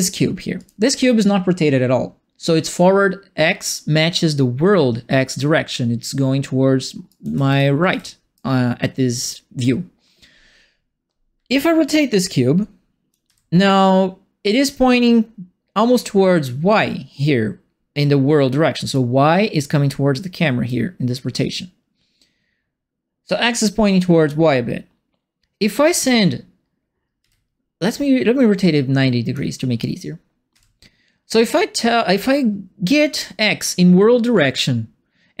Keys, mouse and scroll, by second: 0.5 click, 6.9-7.8 typing, 7.0-8.3 right drag, 11.4 e, 12.1 click, 13.2 w, 18.9-20.6 right drag, 27.2 e, 27.8-29.3 drag, 30.5 w.